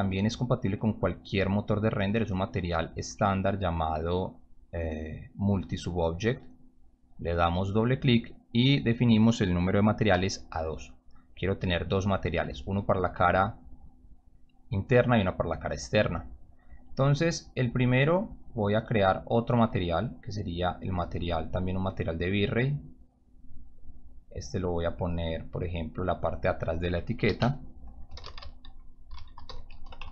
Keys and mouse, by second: 2.8 click, 5.6 click, 6.5 click, 6.8 click, 8.4 click, 10.1 2, 10.7 click, 11.8-12.5 drag, 13.1-13.5 drag, 14.0-14.3 drag, 15.4 click, 15.6 click, 19.2 right click, 20.5 click, 21.8 click, 23.3 click, 24.6 click, 24.7 click, 26.3 click, 27.8-30.1 typing.